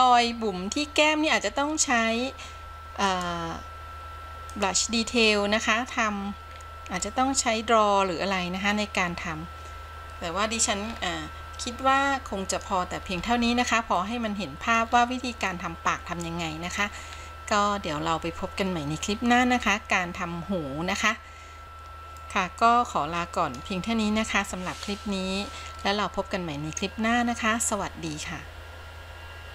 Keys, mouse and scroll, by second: 3.2 click, 6.7-7.2 scroll down 2, 7.2-10.9 middle drag, 11.1-11.8 scroll up 3, 12.0 middle click, 13.3-14.2 scroll down 5, 14.2 middle click, 15.2-15.7 scroll up 3, 15.7-17.0 middle drag, 17.3-18.1 scroll up 2, 18.1-21.6 scroll down 2, 22.3-23.8 middle drag.